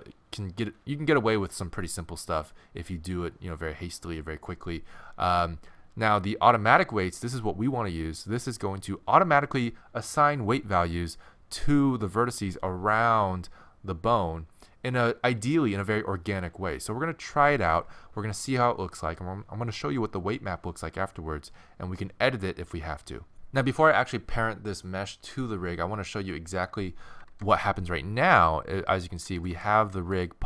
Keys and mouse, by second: 27.2 ctrl+Tab, 27.2-28.8 right drag, 27.4 r, 29.4 r.